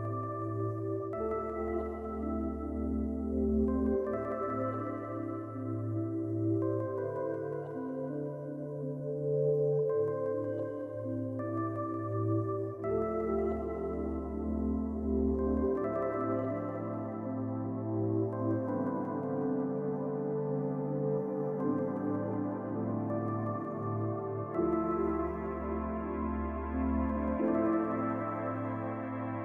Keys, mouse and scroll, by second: 1.6-2.4 shift+scroll down 2, 11.4 ctrl+click, 16.3 ctrl+click, 18.0 ctrl+click, 20.1 shift+click.